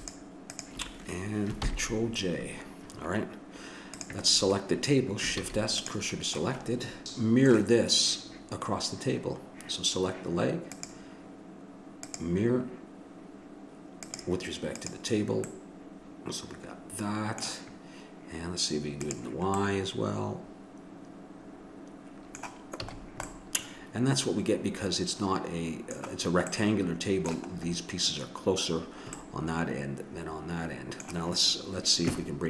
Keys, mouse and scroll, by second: 1.6 ctrl+j, 4.3 click, 5.4 shift+s, 7.0 right click, 10.7-13.3 drag, 14.0-15.5 drag, 15.5 middle click, 19.0 click, 19.6-20.9 middle drag, 22.9 a, 23.3-25.1 middle drag, 26.5-29.5 middle drag.